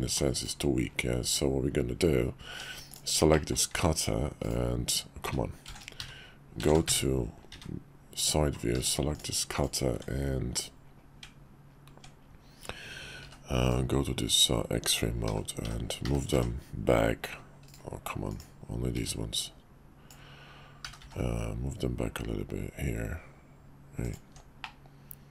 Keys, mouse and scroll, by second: 2.5 q, 3.3-4.5 drag, 5.2 `, 6.8 `, 7.5 `, 8.7 q, 9.9 Tab, 13.2 b, 15.2 g, 18.3 click, 18.9 b, 20.8 g, 24.2 Tab, 24.6-25.3 middle drag.